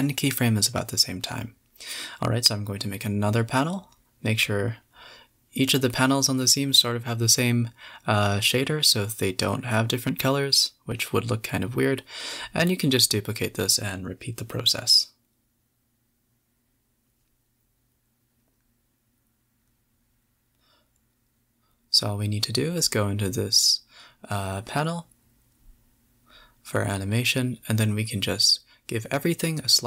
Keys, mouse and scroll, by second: 0.0-1.6 middle drag, 1.6 click, 2.8 click, 3.3 click, 3.8 click, 4.7-7.3 drag, 10.0 click, 10.3 shift+click, 10.7 shift+click, 11.1 shift+d, 11.9-13.9 middle drag, 14.1-16.2 drag, 17.9 click, 18.2-18.8 middle drag, 18.8 click, 19.6-20.4 middle drag, 20.4 space, 21.7 drag, 22.4 space, 23.4-24.0 drag, 24.0 a, 24.3-24.7 drag, 25.0 click, 25.3-26.4 drag, 26.7 click, 27.8-29.8 drag.